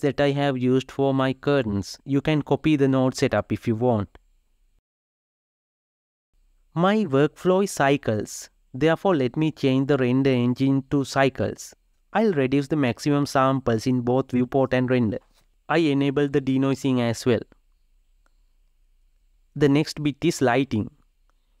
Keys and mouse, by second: 2.0-4.7 middle drag, 4.7 Tab, 14.0-21.6 drag.